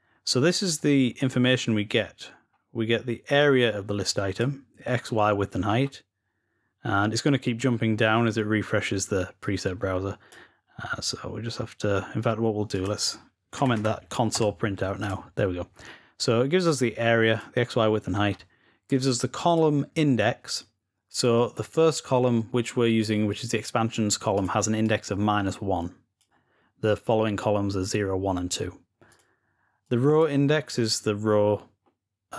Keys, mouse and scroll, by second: 2.2-3.1 scroll down 2, 3.2-4.9 drag, 5.3-6.9 scroll up 4, 9.2 click, 9.3-9.7 scroll down 4, 9.5 click, 9.7-11.4 drag, 12.5 click, 14.8 click, 15.4-16.0 scroll up 2, 16.5 click, 17.4-18.7 scroll down 2, 18.7-19.4 scroll down 1, 19.4-20.9 drag, 24.2 click, 26.2 click, 28.9-30.2 drag.